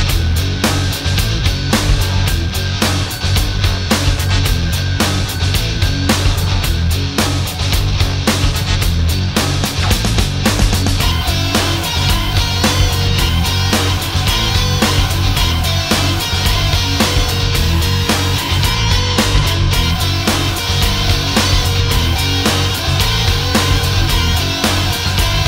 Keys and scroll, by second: 2.9 Up, 3.4 Up, 7.1 alt+space.